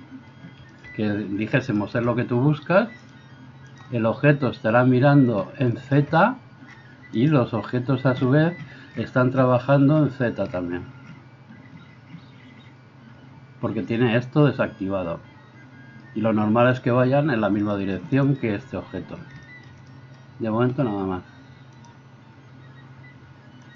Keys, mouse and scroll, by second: 3.1-23.7 drag, 7.2 middle click, 7.2 right click.